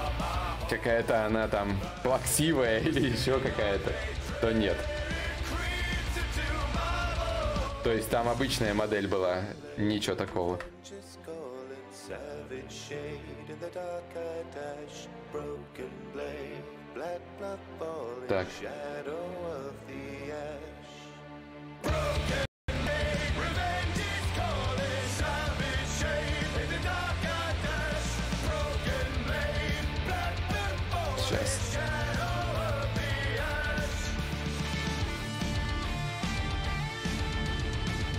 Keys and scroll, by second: 9.3 alt+Tab, 9.9 alt+Tab, 10.3 alt+Tab.